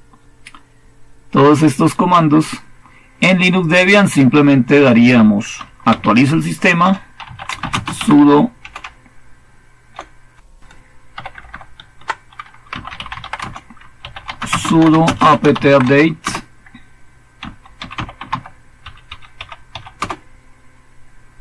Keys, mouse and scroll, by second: 3.8-5.8 scroll down 1, 5.8 typing, 6.9-9.8 typing, 11.1 ctrl++, 11.2 ctrl++, 11.4 ctrl++, 12.4-20.1 typing.